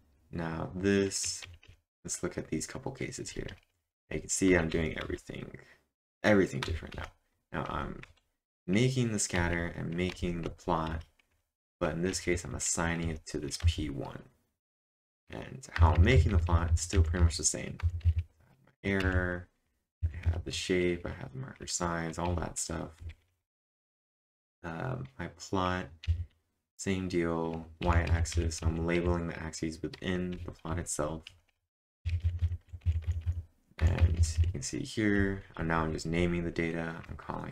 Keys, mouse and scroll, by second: 1.0-1.7 typing, 3.0-4.7 typing, 3.9 Return, 6.7 typing, 9.1-10.6 typing, 11.9-13.6 typing, 16.5 typing, 18.8-21.0 typing, 23.4-24.3 typing, 27.9-30.9 typing, 32.4-36.2 typing.